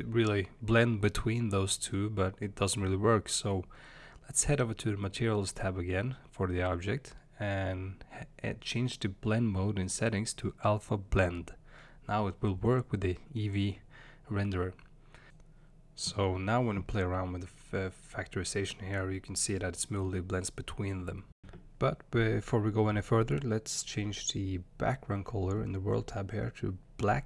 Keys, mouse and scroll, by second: 8.9-11.2 drag, 12.8-22.5 drag, 23.0 space, 26.1 click.